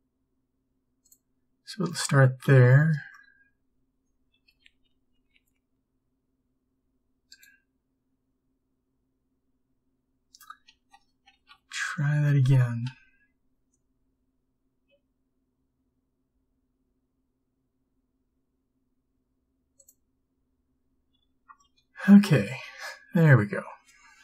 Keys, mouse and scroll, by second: 4.6 b, 11.4 ctrl+z, 13.0 g.